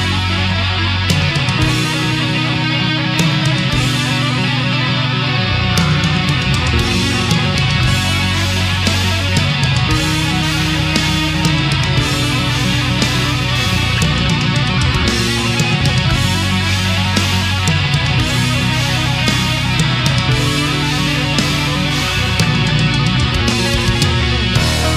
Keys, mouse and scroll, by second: 1.0 a, 1.3 scroll down 1, 1.8 scroll down 2, 2.5 click, 4.6 space, 5.3 click, 7.1 click, 8.4 click, 10.2 click, 10.6 Return, 11.7 a, 12.6 right click, 13.0-14.8 middle drag, 15.2 scroll up 2, 15.7 middle click, 16.9-21.1 drag, 21.3-21.6 scroll down 1, 21.9-22.8 middle drag, 23.3 shift+right click, 24.2 shift+right click.